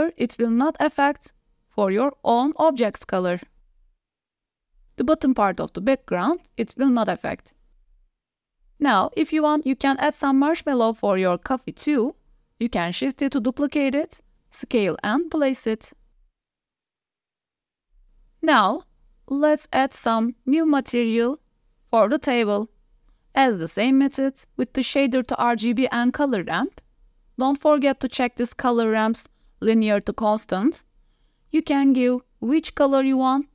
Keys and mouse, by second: 3.8 drag, 7.8 q, 7.8 w, 7.8 s, 8.0 w, 9.2 click, 10.0 KP_7, 10.7 shift+d, 12.8 KP_Decimal, 13.4-14.4 drag, 14.9 s, 15.9 s, 15.9 z, 19.5 drag, 19.5 KP_0, 19.5 a, 19.7 g, 20.8-21.6 drag, 22.2-22.8 drag, 22.9 shift+a, 24.0 drag, 24.4 shift+a, 26.3-27.3 drag, 27.4 middle click, 28.1-29.2 drag, 29.5-31.5 drag, 31.9 click.